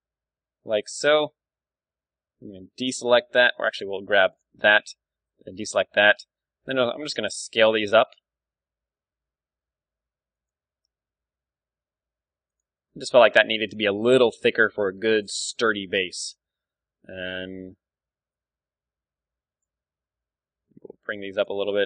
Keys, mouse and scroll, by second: 0.7 z, 1.2 b, 3.5 b, 4.8 b, 5.9 s, 10.4-12.2 drag, 10.8 z, 11.2 s, 12.6-14.5 drag, 12.7 Tab, 13.3-18.2 middle drag, 15.3 KP_1, 16.7 Tab, 16.9 z, 17.2 a, 17.7 b, 19.8 z, 20.5 g, 21.5-21.8 drag, 21.6 z.